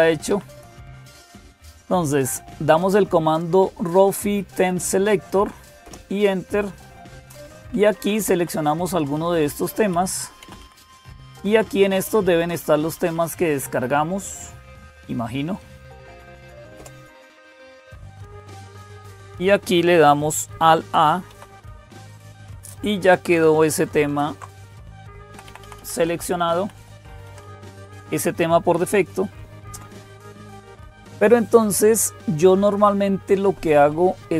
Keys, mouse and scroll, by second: 0.0-34.3 typing, 0.1 Up, 5.6 Return, 7.5 Down, 7.8 Down, 8.0 Down, 8.2 Down, 8.4 Down, 8.7 Down, 8.9 Down, 9.1 Down, 9.7 Up, 10.2 Down, 10.4 Down, 10.6 Down, 10.8 Down, 11.8 Down, 16.6 Return, 21.1 alt+a, 23.9 alt+super+d, 25.1 Down, 25.3 Down, 25.4 Down, 25.6 Down, 26.0 Down, 26.4 Up, 26.9 Up, 27.0 Up, 27.2 Up, 27.5 Down, 27.7 Down, 27.9 Down, 29.5 Up.